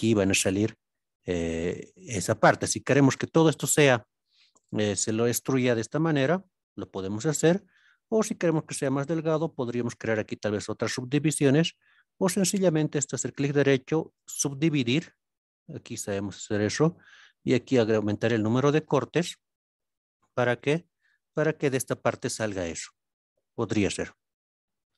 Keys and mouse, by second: 2.0 middle click, 3.3 click, 4.2-5.0 middle drag, 8.2-8.9 middle drag, 13.0-14.2 right drag, 20.6 click, 21.3 shift+click, 22.5-24.1 middle drag.